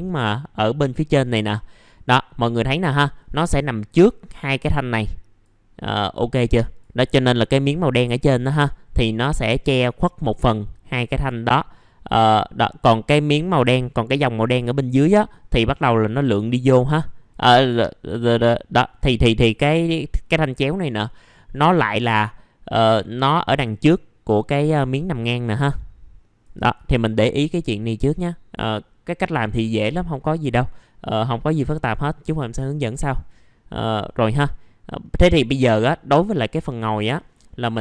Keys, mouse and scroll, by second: 35.0 middle click, 37.7 click.